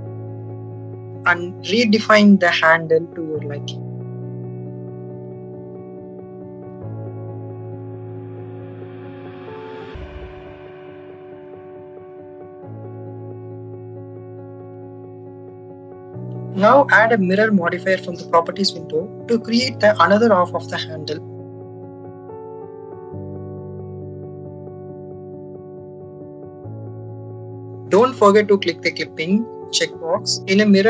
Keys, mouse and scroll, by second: 0.1 click, 0.7 click, 1.3 click, 1.8 click, 2.7 click, 3.3 click, 4.2 click, 5.0 click, 6.0 click, 7.1 click, 7.3 click, 8.6 click, 8.9 click, 10.0 click, 10.2 click, 10.7 click, 11.2-12.8 drag, 13.1 click, 15.1 click, 18.1-20.6 drag, 22.7 click, 24.9 click, 25.6 click, 26.9-29.3 drag.